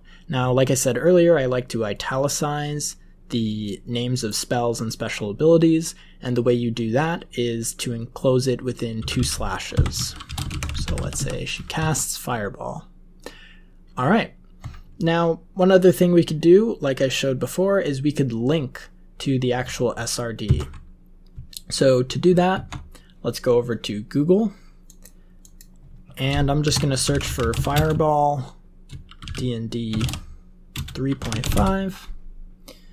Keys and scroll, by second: 8.9-11.6 typing, 11.7 Right, 20.4 super+Right, 22.5 ctrl+Tab, 26.3-28.1 typing, 29.2-31.9 typing.